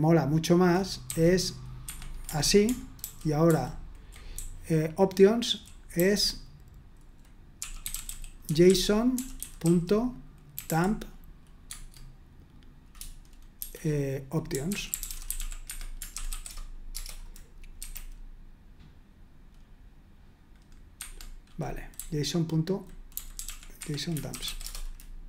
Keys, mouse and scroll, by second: 0.0-1.0 typing, 1.8 Escape, 3.0 ctrl+i, 3.5 ctrl+u, 4.1-11.2 typing, 11.6 Tab, 13.6-16.6 typing, 17.8 F5, 21.0 Escape, 21.9-24.8 typing.